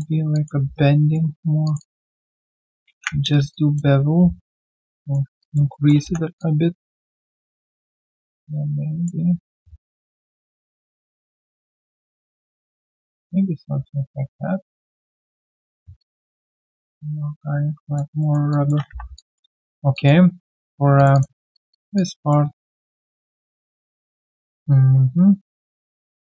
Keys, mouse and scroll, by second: 0.3 alt+click, 0.6 alt+q, 0.7 right click, 1.8 double click, 2.8 ctrl+b, 3.5 alt+click, 5.4 alt+click, 5.7 alt+middle click, 6.0 3, 6.4 alt+click, 11.7 alt+click, 14.9 alt+click, 15.3 alt+right click, 15.7 alt+middle click, 16.0 alt+click, 18.2 alt+middle click, 18.5 alt+click, 19.6 alt+middle click, 19.9 alt+click, 20.4 right click, 21.1 double click, 21.5 shift+click, 21.7 shift+double click, 21.9 alt+click, 22.5 alt+right click, 22.7 alt+click, 23.0 alt+middle click, 23.7 shift+click, 24.2 alt+click.